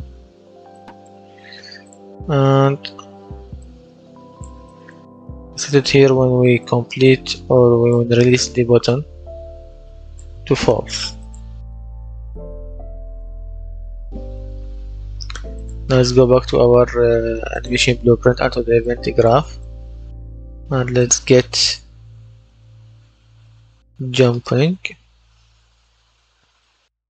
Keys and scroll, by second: 2.6 ctrl+d, 21.7-25.1 typing.